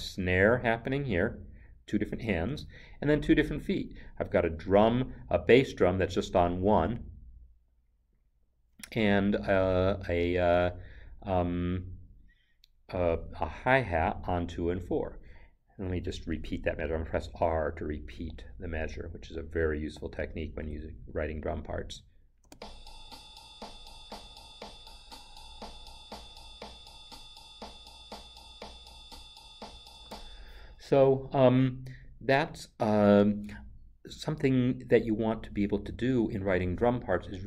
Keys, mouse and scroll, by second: 17.3 r, 20.6 Escape, 22.4 space, 29.9 space.